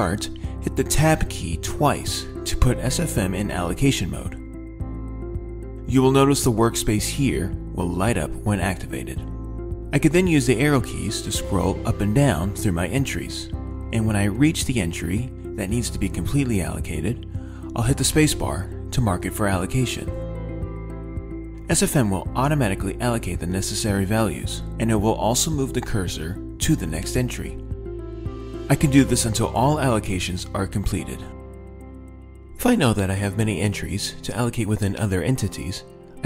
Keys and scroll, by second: 11.3 Up, 11.6 Down, 12.5 Up, 13.3 Down, 15.6 Up, 17.5 space.